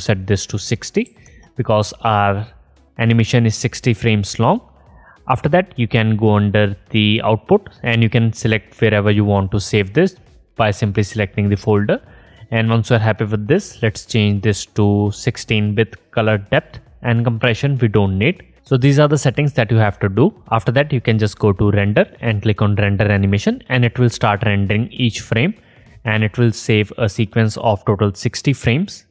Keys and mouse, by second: 3.9-16.2 drag, 16.4-17.9 drag.